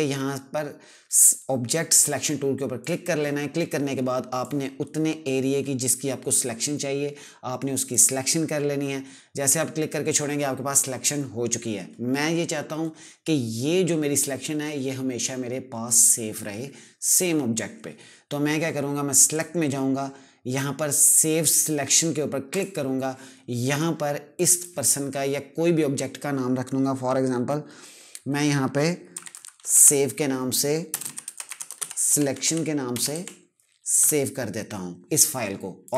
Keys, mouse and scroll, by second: 2.1 click, 18.6 click, 21.8 click, 28.2-33.8 typing, 35.2 click.